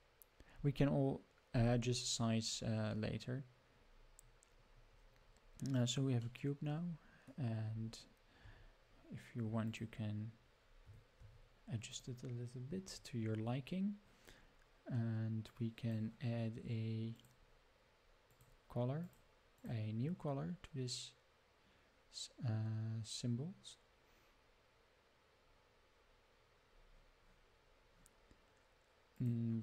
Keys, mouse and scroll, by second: 3.8-4.8 scroll up 8, 4.9 scroll down 1, 5.0-5.6 scroll up 7, 6.2-7.3 middle drag, 7.7 scroll up 3, 8.4 Tab, 9.5 3, 9.7 click, 10.9 g, 12.5-12.9 scroll down 4, 12.9 Tab, 13.2-14.3 scroll down 6, 15.5 click, 17.2 drag, 18.3 click, 19.6-26.4 drag, 29.1 click.